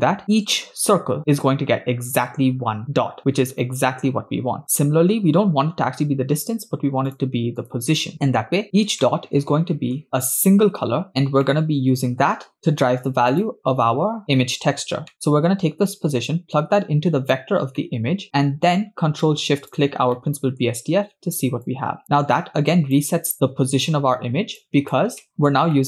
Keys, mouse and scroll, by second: 0.3-1.3 scroll up 10, 1.3-2.6 scroll up 1, 2.6-4.0 scroll up 1, 4.0-5.4 scroll down 3, 5.4-6.5 scroll down 1, 7.3 ctrl+shift+click, 7.6 ctrl+shift+click, 8.8 scroll down 10, 9.1-10.0 shift+middle drag, 11.1 scroll down 8, 11.4 middle click, 12.5 scroll down 1, 13.3 click, 14.1 scroll up 3, 15.2 middle click, 16.0-17.4 drag, 17.8-18.1 middle drag, 18.2 click, 19.9 ctrl+shift+click, 20.2 middle click, 21.6 click, 22.4 click, 23.3 middle click, 24.7 click, 25.2 middle click, 25.3 scroll up 3, 25.7 middle click.